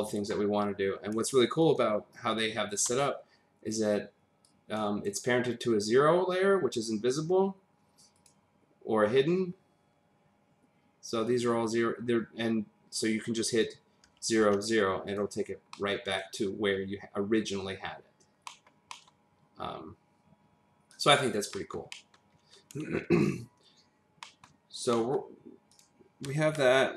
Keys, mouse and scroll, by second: 1.6 click, 4.5 click, 7.3 scroll, 8.2 click, 9.2-11.9 scroll down 2, 12.0 scroll, 12.2-13.6 scroll up 1, 13.6 click, 14.4 0, 15.0 click, 15.7 middle click, 18.4 middle click, 18.9 middle click, 20.9 click, 21.5 middle click, 21.9 double middle click, 24.2 middle click, 24.9 middle click, 25.7 click.